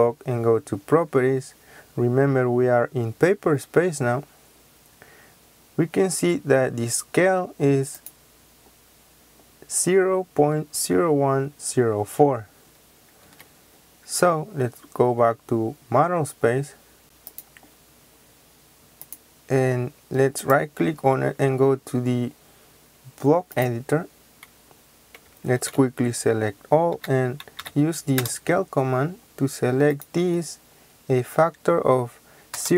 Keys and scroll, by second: 13.1 Escape, 25.5 ctrl+a, 26.8-28.1 typing, 32.4 KP_0.